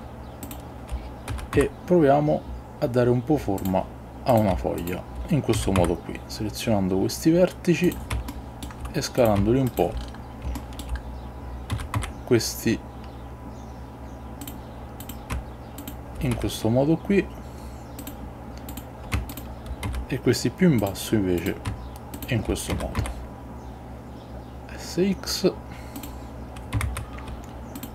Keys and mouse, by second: 1.4 s, 1.7 x, 3.7 click, 4.3 click, 5.7 s, 5.9 x, 7.9 click, 8.4 shift+middle click, 10.7 shift+middle click, 11.8 s, 12.1 x, 14.5 click, 15.1 click, 15.9 shift+click, 16.4 s, 18.1 click, 19.4 shift+click, 20.0 s, 20.9 click, 21.5 click, 22.8 s, 23.1 x, 26.1 click, 27.0 shift+z.